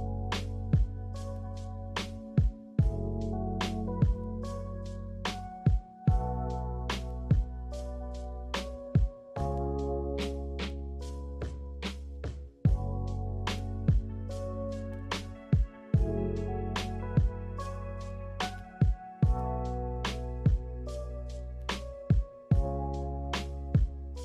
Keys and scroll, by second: 2.3-3.2 typing, 5.0 ctrl+z, 6.9-7.9 typing, 9.4 Return, 15.4 b, 19.1 a.